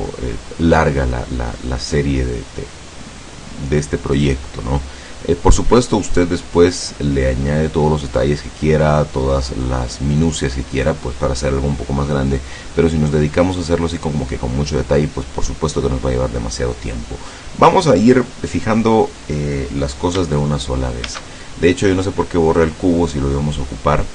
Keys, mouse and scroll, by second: 21.1 shift+a, 22.6 click.